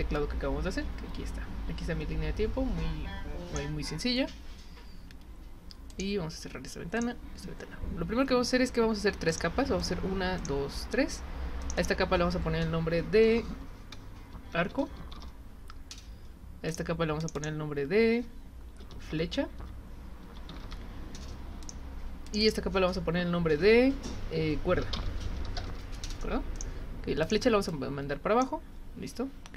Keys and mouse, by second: 5.9 click, 7.0 click, 9.3 click, 9.8 click, 10.4 click, 11.6 click, 11.8 click, 16.7 click, 17.2 click, 17.4 click, 21.6 click, 22.3 click, 22.4 click, 26.5 click, 27.2 click, 27.7 click.